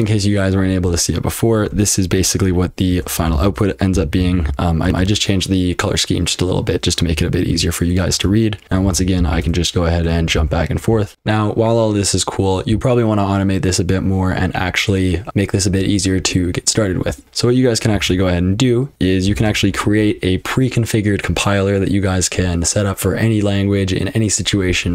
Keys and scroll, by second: 3.4 ctrl+w, 3.6-5.2 typing, 7.1-7.5 typing, 8.1 Return, 8.6 ctrl+w, 8.6-9.2 typing, 9.4 Return, 10.2 ctrl+w, 10.3 j, 11.1 F12, 17.9 :, 19.3 e, 19.4 space.